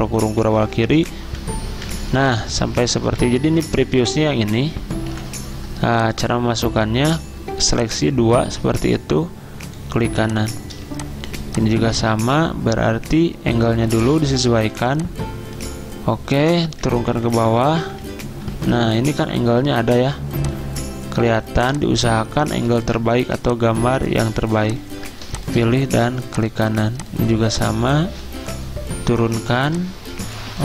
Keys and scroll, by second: 0.1 ctrl+[, 0.4 ctrl+[, 0.6 ctrl+[, 0.7 ctrl+[, 8.7 ctrl+z, 16.8 ctrl+[, 17.0 ctrl+[, 17.1 ctrl+[, 17.3 ctrl+[, 17.5 ctrl+[, 17.8 ctrl+[, 18.1 ctrl+[.